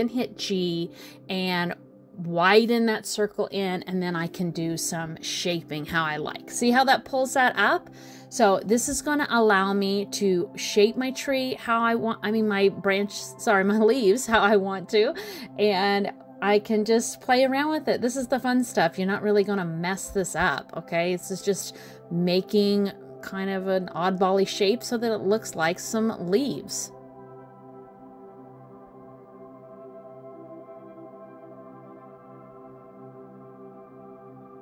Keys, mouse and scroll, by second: 7.2 click, 7.8 g, 9.8 middle click, 10.8 click, 11.3 g, 13.1 click, 13.3 middle click, 14.0 g, 15.0 middle click, 16.1 click, 16.4 g, 17.4 middle click, 18.9 click, 19.2 g, 20.2 middle click, 21.6 click, 21.9 g, 22.9 middle click, 24.6 click, 24.9 g, 26.1 middle click, 27.2 click, 27.4 g, 29.0 click, 29.2 g, 30.2 middle click, 31.5 click, 31.7 g, 32.5 middle click, 33.1 middle click, 34.0 middle click.